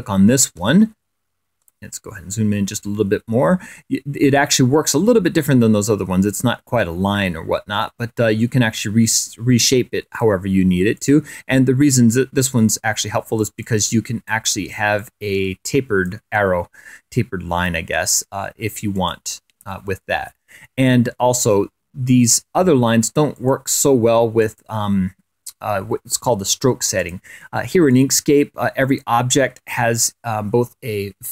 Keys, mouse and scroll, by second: 0.4 click, 1.4 scroll up 2, 1.7 click, 2.5 click, 2.6-3.2 scroll up 1, 5.1-6.4 scroll up 1, 6.4-7.9 scroll up 1, 12.0 click, 14.5 click, 15.8-17.2 drag, 18.0 click, 19.0-19.3 scroll down 3, 19.9 ctrl+click, 20.9 click, 25.3 click, 26.4 click, 29.0 click, 29.9 click, 30.9 click.